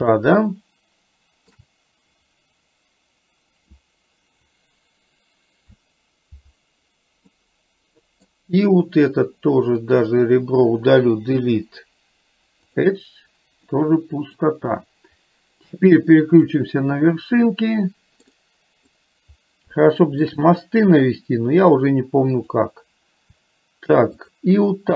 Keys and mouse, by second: 0.2-1.7 shift+middle drag, 7.3-8.3 middle drag, 10.0 click, 11.5 Delete, 13.8 middle click, 17.6-19.1 middle drag, 19.8 shift+middle click, 22.5 click.